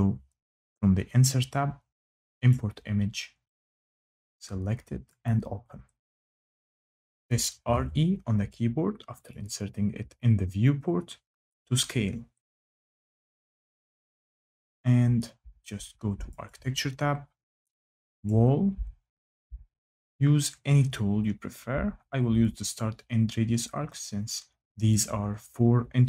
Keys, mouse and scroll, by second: 2.2 click, 3.6 click, 4.9 click, 6.0 click, 7.1-8.1 typing, 9.0 click, 11.3 click, 12.5 click, 14.4 click, 16.2 click, 17.9 click, 22.4 click, 23.2 scroll, 24.7 click.